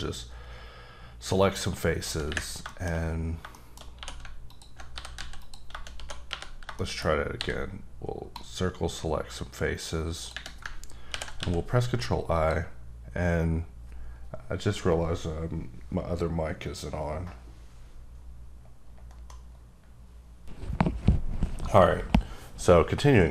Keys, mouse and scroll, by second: 2.7 shift+middle click, 3.4 scroll down 1, 3.5 middle click, 3.9-7.3 typing, 4.5 alt+click, 5.4 click, 6.8 middle click, 7.0 scroll up 2, 7.6-8.0 scroll down 2, 8.0-8.3 scroll up 2, 8.3 click, 11.4 x, 12.3 click.